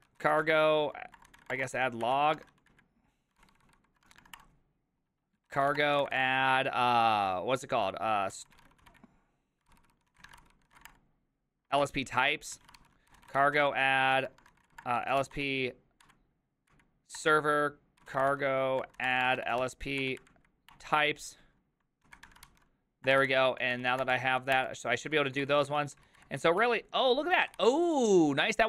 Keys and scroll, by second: 0.0-6.7 typing, 4.4 Return, 8.1-10.8 typing, 10.8 ctrl+c, 10.8 ctrl+:, 10.9 Return, 11.8 ctrl+a, 12.6-20.1 typing, 12.8 ctrl+c, 16.1 Up, 20.7 Return, 21.8-28.1 typing.